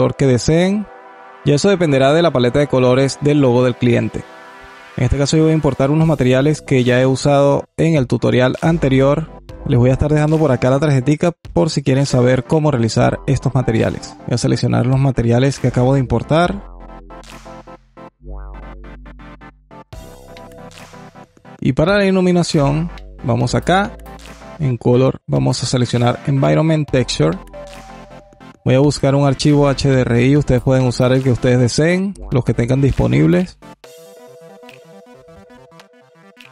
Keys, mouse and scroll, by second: 3.5-6.1 drag, 12.9 click, 13.9 click, 15.4 click, 16.5 click, 18.7 click, 21.1 click, 21.6-22.8 alt+drag, 24.2-26.8 drag, 27.4-30.0 drag, 36.3-36.5 drag.